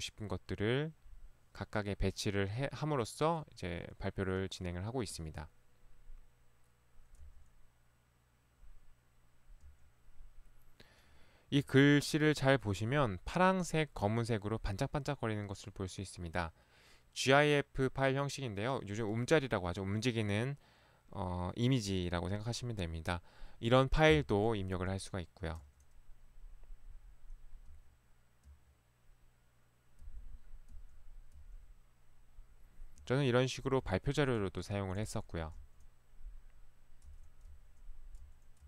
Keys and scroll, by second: 5.2 Right, 7.2 Right, 9.6 Right, 25.0 Right, 25.6 Right, 27.7 Right, 28.4 Right, 30.1 Right, 30.7 Right, 33.0 Right, 33.8 Right, 35.1 Right, 35.7 Right, 37.6 Right, 38.5 Right.